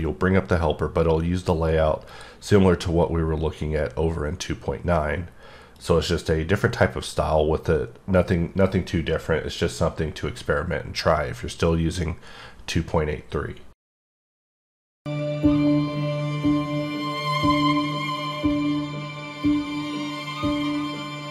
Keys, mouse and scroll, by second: 2.1 click, 5.8 click.